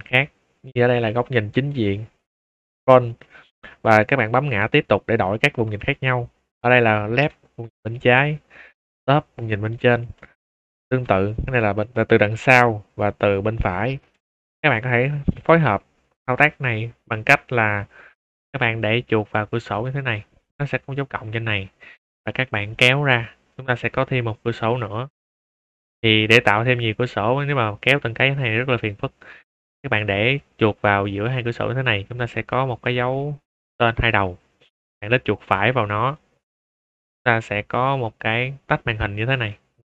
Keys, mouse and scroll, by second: 1.2 click, 2.3 middle click, 2.8 shift+middle drag, 3.2 middle click, 4.5 `, 6.7 click, 7.9 middle click, 7.9 scroll down 2, 8.0 `, 8.7 click, 9.6 scroll down 2, 10.1-10.4 middle drag, 10.6 shift+middle drag, 11.0 `, 14.4-15.0 middle drag, 15.2 shift+middle drag, 16.1 shift+middle drag, 22.6-26.5 drag, 35.9 right click.